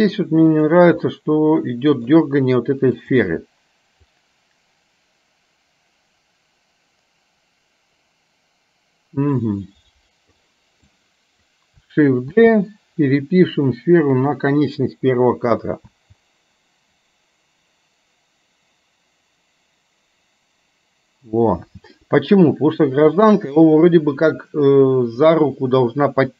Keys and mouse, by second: 0.8 click, 1.2-2.2 middle drag, 3.0 click, 4.2-10.4 drag, 10.9 click, 12.5 shift+d, 16.0 space, 21.7 space, 22.0 middle click, 23.3 middle click, 25.3-26.3 middle drag.